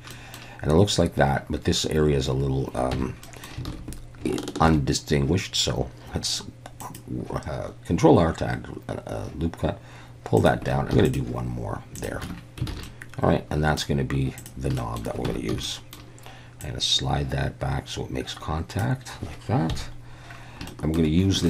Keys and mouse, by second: 0.1 middle click, 2.9 Tab, 3.2 middle click, 3.7 alt+a, 4.6 ctrl+r, 10.4 click, 10.9 ctrl+r, 12.0 click, 12.2 Tab, 12.7 alt+a, 12.8-13.8 middle drag, 14.4 click, 14.8 middle click, 15.3 Tab, 15.5 a, 15.7 middle click, 16.7-18.8 drag, 19.7 KP_1, 20.7 shift+middle click.